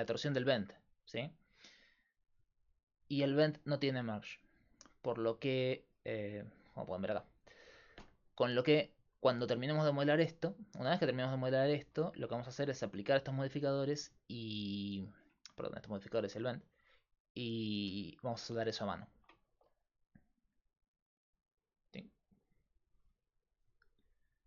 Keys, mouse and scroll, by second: 2.9-9.1 drag, 10.3-20.7 middle drag, 20.7-24.4 drag.